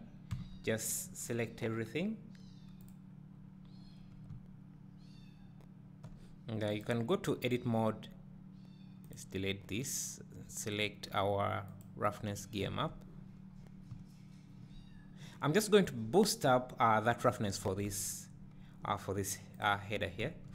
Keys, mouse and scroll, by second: 1.3 b, 2.9-3.2 drag, 5.0 `, 7.0 click, 9.1-19.8 drag, 13.5-13.9 scroll up 2, 13.9 `, 16.0-16.6 scroll up 2, 17.9 Tab, 20.2 `.